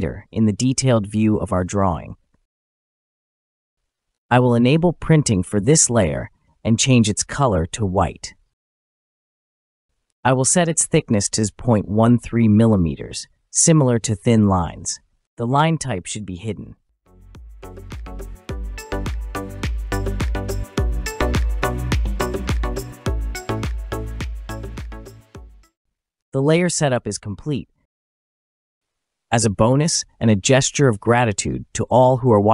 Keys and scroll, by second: 0.1 typing, 3.7 Return.